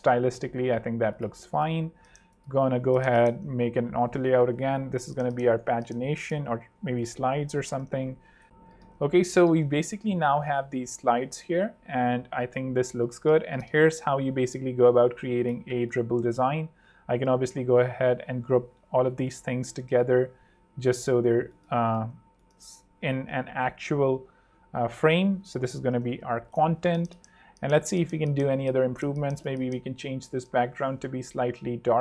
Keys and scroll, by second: 0.7 ↺, 0.8 ↻, 1.8 super+d, 2.5 super+z, 2.9 shift+super+a, 4.4 shift+super+r, 4.6 shift+super+p, 4.9-7.5 typing, 9.0 shift+super+3, 9.8 super+3, 12.4 super+2, 12.9 alt+super+2, 13.1 alt+super+z, 13.7 alt+space, 23.0 alt+shift+super+g, 23.6 alt+super+h, 23.9 alt+v, 24.9 alt+super+v, 25.0 alt+super+r, 25.8-26.9 typing, 27.1 super+Return, 27.1 super+3, 28.5 super+2.